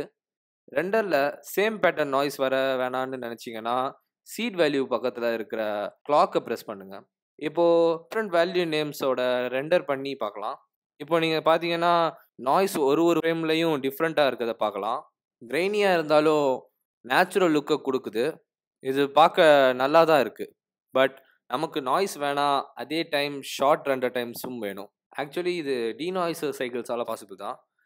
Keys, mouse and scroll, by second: 3.9 click, 6.2-7.1 scroll down 12, 6.7 click, 7.1 click, 8.8 ctrl+F12.